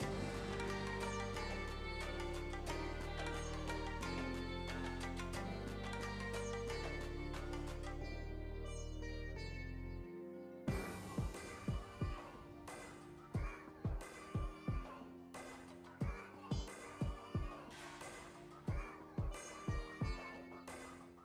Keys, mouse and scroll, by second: 10.0 space, 11.0-12.1 scroll down 2, 12.1-12.7 scroll down 1, 20.2-21.2 drag.